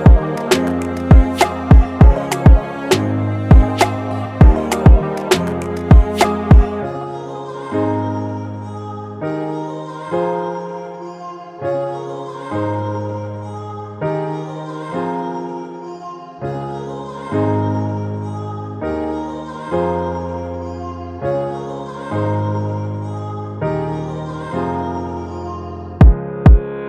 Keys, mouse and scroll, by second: 1.7 double click, 14.4-17.0 typing, 18.2-20.5 typing, 22.3-23.3 typing, 25.4 double click.